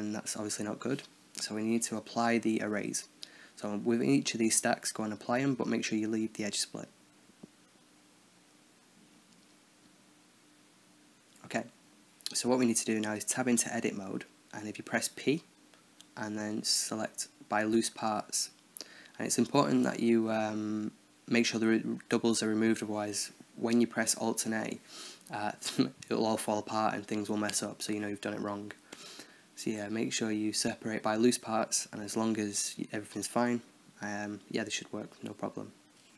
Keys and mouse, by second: 2.2-3.8 middle drag, 3.8-4.9 right drag, 4.6-6.0 drag, 5.4-6.4 right drag, 6.4-7.7 drag, 7.2-8.3 right drag, 8.1-9.3 drag, 8.6-11.9 right drag, 11.9 Tab, 13.1 a, 13.3 a, 14.5 p, 17.2 Tab, 18.0-19.1 drag, 18.5 Tab, 19.1 a, 19.2 a, 19.7 p, 21.0-23.4 drag, 21.8 Tab, 22.3 Tab, 23.4 a, 23.5 a, 23.7 p, 24.9 Tab, 25.3 click, 25.5 Tab, 26.4 a, 26.5 a, 26.7 p, 28.0 Tab, 28.8-32.0 right drag, 32.0-33.0 middle drag, 33.0 KP_1, 34.2 b, 36.0 space.